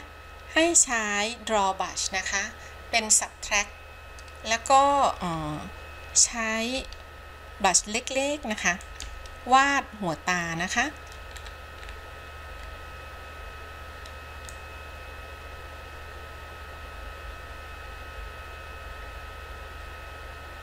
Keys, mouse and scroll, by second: 0.9 click, 11.5-12.8 scroll up 4, 12.8-14.7 scroll down 1, 14.7-20.6 drag.